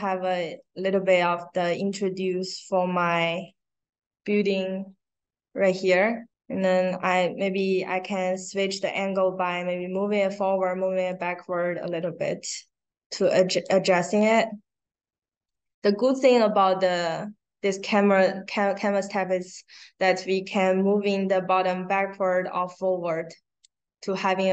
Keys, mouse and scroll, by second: 1.1-1.8 drag, 2.4-3.4 drag, 7.5-11.0 drag, 11.7-12.5 drag, 13.1 click, 20.7-23.5 drag.